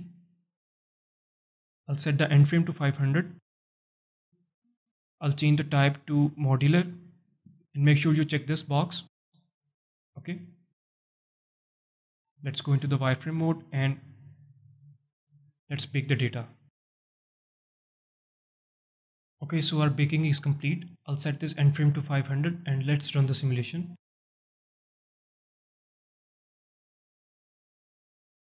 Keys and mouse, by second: 2.4-4.8 drag, 3.7 KP_0, 5.6-6.5 drag, 12.5 z, 13.5 alt+shift+middle click, 14.2 alt+shift+middle drag, 19.2 click, 21.2-23.3 drag, 22.5 KP_0, 24.0 space.